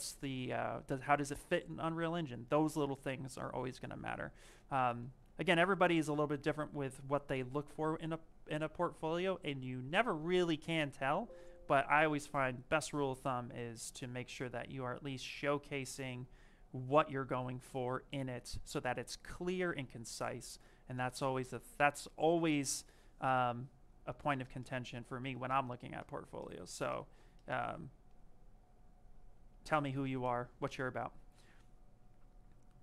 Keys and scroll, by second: 7.4 m.